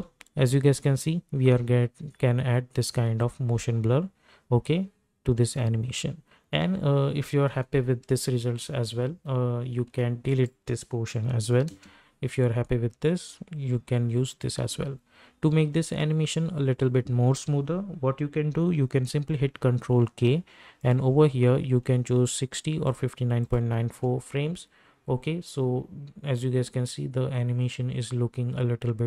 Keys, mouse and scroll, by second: 8.2 space, 10.3 click, 11.7 space, 14.5 space, 18.9 ctrl+k, 21.9 click, 23.9 space.